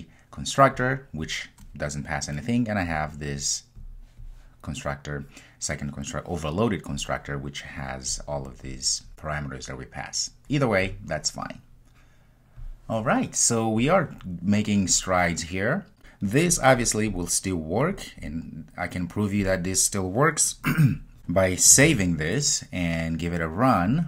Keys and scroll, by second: 21.9 super+s, 23.9 ctrl+r.